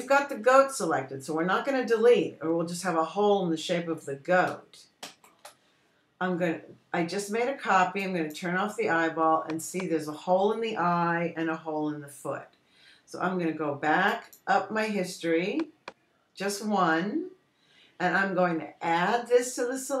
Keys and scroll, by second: 6.5 super+j.